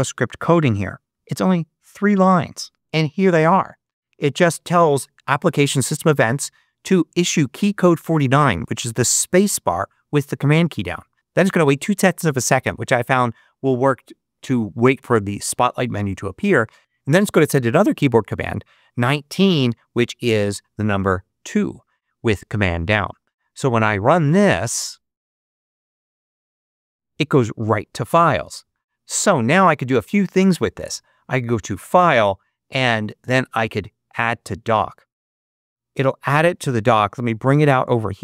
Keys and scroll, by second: 2.7 super+v, 26.1 super+space.